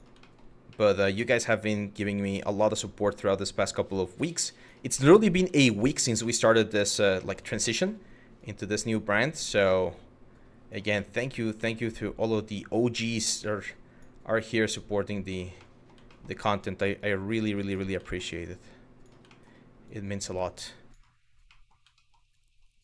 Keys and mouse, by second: 0.7 shift+middle click, 1.7 click, 2.8 click, 4.7 middle click, 5.2 shift+middle click, 5.9 shift+middle click, 6.9 shift+middle click, 7.4 middle click, 8.0 click, 9.5 click, 10.6 shift+middle click, 11.3 shift+middle click, 12.4 click, 14.1 click, 15.2 middle click, 15.7 shift+middle click, 16.6 click, 17.7 shift+middle click, 18.1 click, 19.0 shift+middle click, 19.5 click, 21.2 middle click, 21.6 shift+middle click.